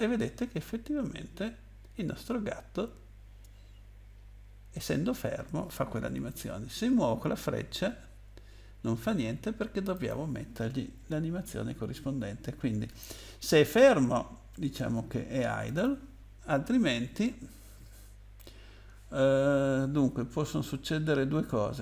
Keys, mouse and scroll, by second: 6.9 Down, 7.4 Down, 9.9 click, 15.6 click, 20.2-20.6 scroll down 2.